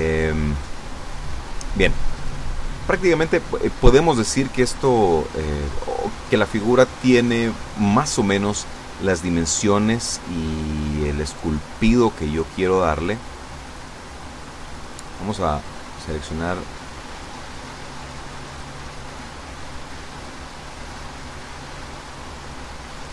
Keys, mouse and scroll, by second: 9.5 ctrl+r, 10.2 click, 12.4 click, 14.1 right click, 16.0 shift+right click, 18.1 shift+right click, 19.6 shift+right click, 21.1-22.5 drag.